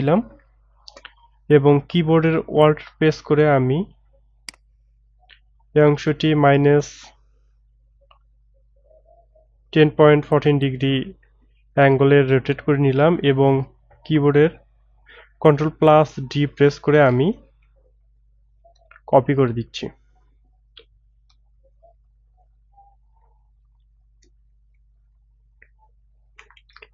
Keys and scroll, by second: 16.3 ctrl+d, 16.9 ctrl+d, 17.7 ctrl+d, 18.5 ctrl+d, 19.2 ctrl+d, 19.8 ctrl+d, 21.6 ctrl+d, 23.2 ctrl+d.